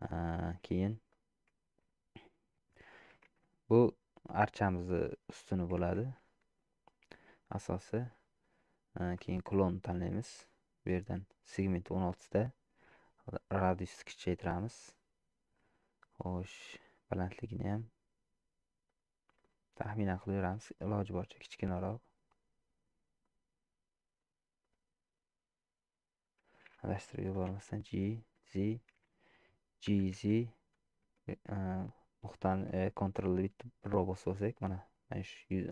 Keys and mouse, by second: 1.0 middle click, 1.6 shift+middle click, 3.3 shift+a, 13.6-15.0 drag, 16.1-18.4 drag, 19.4-20.7 drag, 21.3-22.7 drag, 23.2-24.3 drag, 24.6-26.1 drag, 27.4 g, 29.9 g.